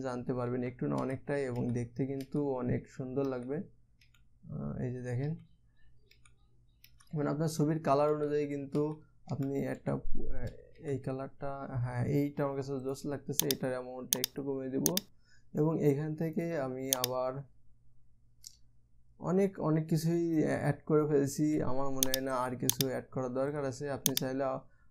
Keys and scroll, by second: 1.1 Down, 1.6 Down, 2.1 Down, 2.8 Down, 3.8 Down, 4.6 Down, 5.8 Down, 6.7 Down, 7.4 Down, 8.7 Down, 9.3 Down, 9.9 Down, 10.4 Up, 11.4 Down.